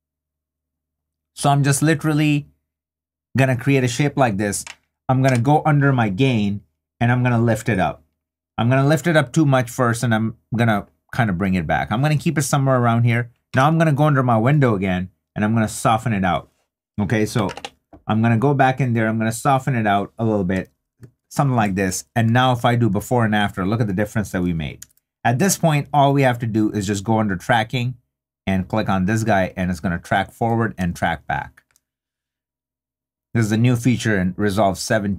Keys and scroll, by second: 22.5 super+d, 30.8 3.